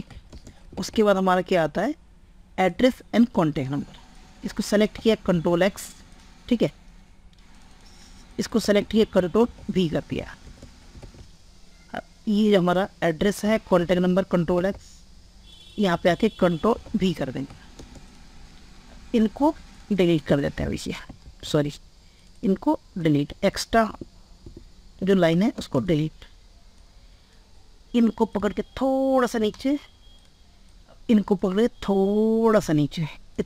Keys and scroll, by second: 0.0 ctrl+space, 0.7 alt+Tab, 5.4 ctrl+x, 8.8 ctrl+a, 9.2 ctrl+v, 10.2 ctrl+space, 10.8 alt+Tab, 13.7 ctrl+x, 14.5 alt+Tab, 16.0 ctrl+a, 16.4 ctrl+v, 17.7 ctrl+space, 21.4 ctrl+z, 22.6 ctrl+z, 25.5 ctrl+space.